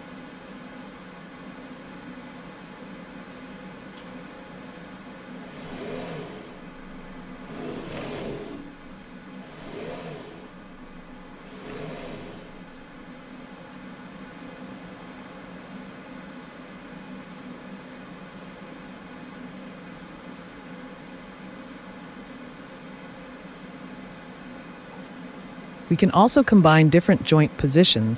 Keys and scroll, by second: 4.0 t, 14.4 typing.